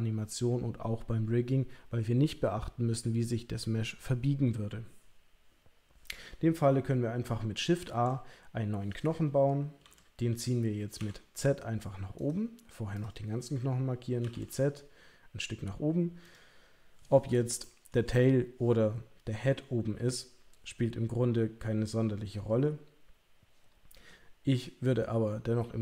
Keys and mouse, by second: 7.8 shift+a, 9.8 g, 12.9 click, 14.2 g, 17.6 shift+middle click.